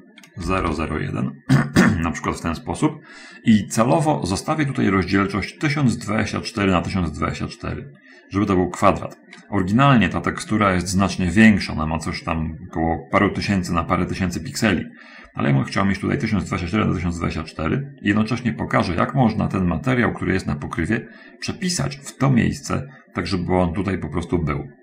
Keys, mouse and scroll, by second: 0.0-1.0 typing.